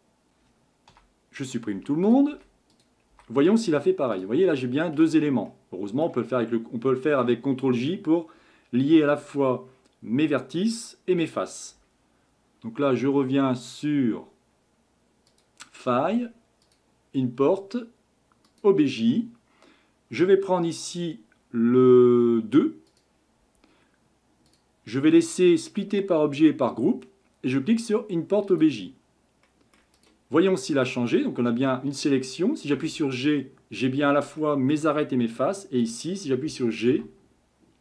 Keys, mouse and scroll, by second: 0.1 click, 0.9 Delete, 1.4 click, 1.8 Delete, 2.0 click, 2.3 Delete, 2.7 click, 3.1 Delete, 4.1 click, 5.0 Delete, 5.5-8.5 middle drag, 15.3-18.4 drag, 29.5 middle click, 30.0 click, 30.3-30.7 scroll up 3, 30.7 click, 32.7 g, 34.4-35.4 middle drag, 35.4-35.8 scroll up 1, 35.8 click, 36.9 g.